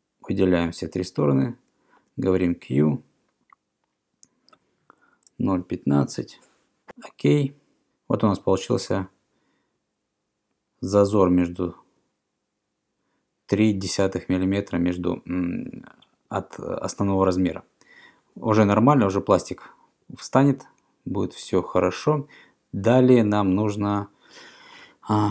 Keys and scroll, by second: 2.0 q, 5.0-6.5 typing.